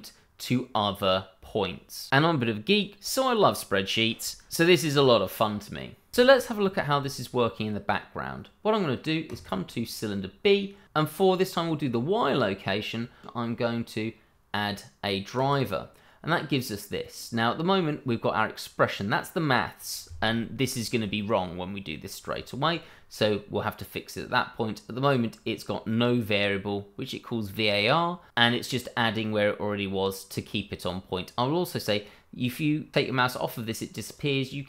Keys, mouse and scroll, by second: 6.6 click, 9.2 click, 13.2 right click, 15.3 click, 34.0 right click.